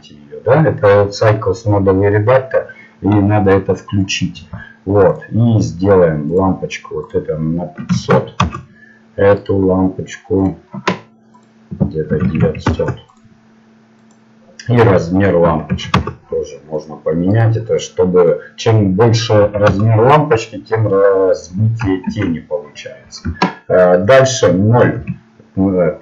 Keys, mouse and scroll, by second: 8.7-20.1 drag, 8.7 KP_0, 14.6 KP_0, 17.3-20.1 right drag, 22.1 shift+c, 25.0 KP_0.